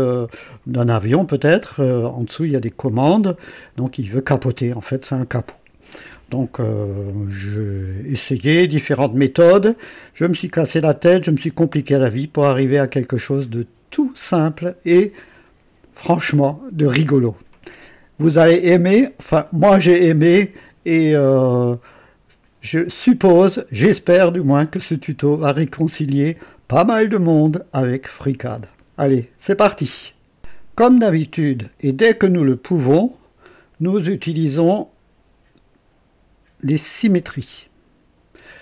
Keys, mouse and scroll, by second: 1.7 click, 3.5 click, 5.9-9.4 drag, 11.2-13.3 drag, 32.7-38.6 drag.